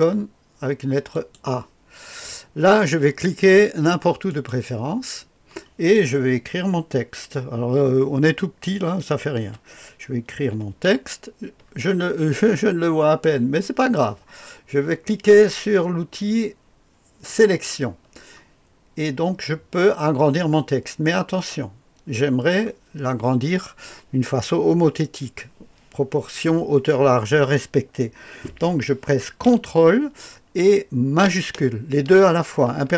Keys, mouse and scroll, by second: 1.1 click, 4.2 click, 9.4 typing, 10.4 typing, 17.2 click.